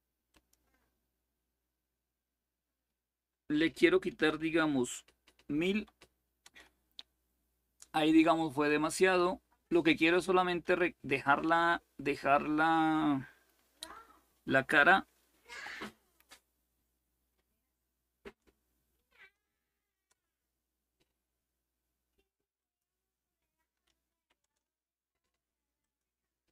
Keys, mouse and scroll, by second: 0.0 click, 3.8 Delete, 4.0 1, 5.3 0, 6.2 Return, 8.4-9.5 drag, 12.5 Delete, 15.2 6, 17.8 Delete, 18.9 8, 19.8 Return, 22.3 click, 23.3 Delete, 23.8 9, 24.1 Return, 25.5 click.